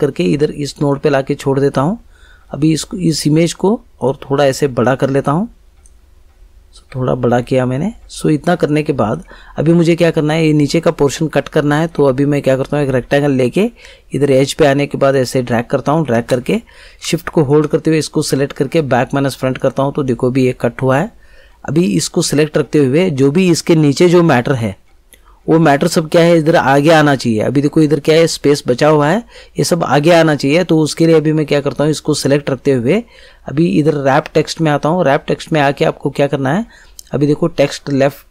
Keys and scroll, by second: 16.1 space.